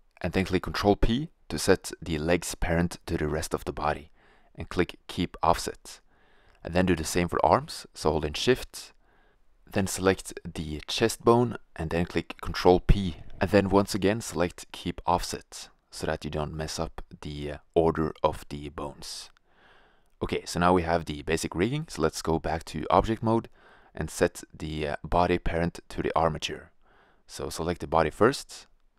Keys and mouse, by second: 2.6 ctrl+p, 5.9 a, 13.0 ctrl+p, 18.0-19.6 middle drag, 19.8 middle click, 28.6 right click.